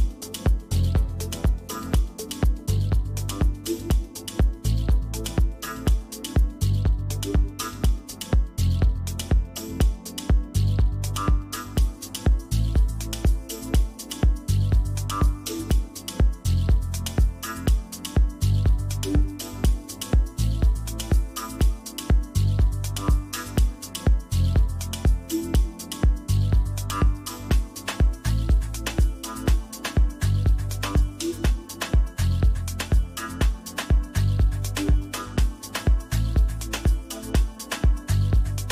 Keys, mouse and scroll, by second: 2.6 click, 5.5 click, 16.0 click, 21.4 click, 24.4 click, 28.9 click.